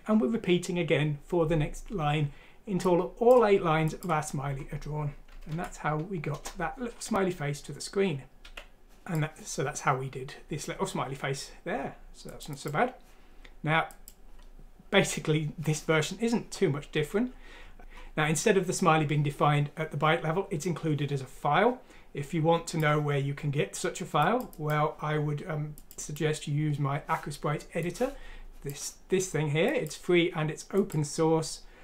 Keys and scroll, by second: 5.5 F6, 6.3 Return, 8.4 typing.